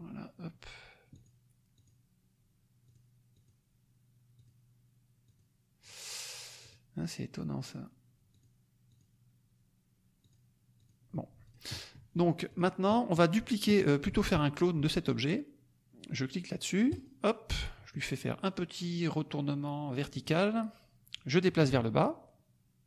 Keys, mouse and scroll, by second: 1.2 click, 1.7 click, 2.9 click, 3.3 click, 4.4 click, 5.2 click, 6.6 click, 8.2 click, 8.9 click, 10.3 click, 10.7 click, 11.4 click, 11.7 middle click, 12.4 click, 16.8 click, 20.1 click, 21.1-22.8 drag.